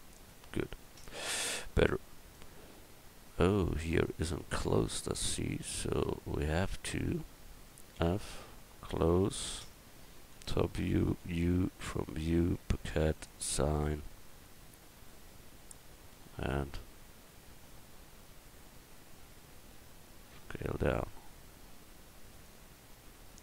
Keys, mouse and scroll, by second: 0.3 Tab, 4.6 Tab, 5.0-7.0 drag, 8.0 f, 10.3 KP_7, 11.1 u, 13.3 click, 16.1 s, 22.8 Tab.